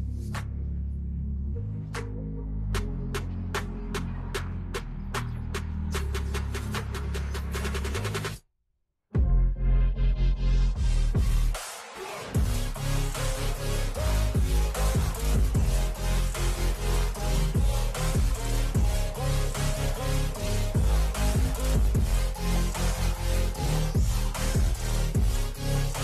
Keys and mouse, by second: 0.0-5.7 typing, 8.4-14.8 typing, 16.3 click, 18.1 click, 21.0 click, 22.6 click, 24.1 click, 25.6 click.